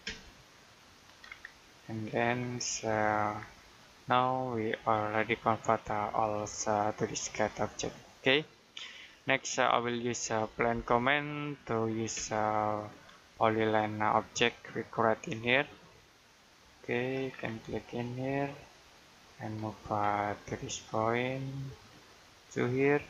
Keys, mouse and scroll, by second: 0.7 click, 1.1-2.7 scroll down 1, 2.7 middle click, 3.2-3.5 scroll down 1, 3.5 middle click, 5.0-5.8 scroll down 1, 6.0 middle click, 7.8 Escape, 8.3 middle click, 8.7-10.3 scroll up 1, 10.3 p, 12.7-13.1 scroll up 1, 15.1 click, 17.2-17.6 scroll down 1, 17.6 middle click, 20.0 middle click, 21.6 click.